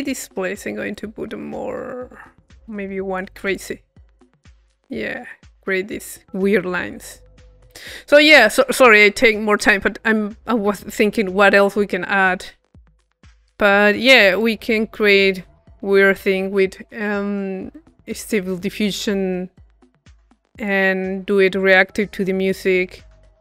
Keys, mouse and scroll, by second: 0.9-6.0 drag, 6.0-8.5 middle drag, 11.9 middle click, 13.2-15.4 drag, 16.3-17.5 middle drag, 17.9-19.0 middle drag, 19.5-21.2 drag, 21.7-23.0 drag.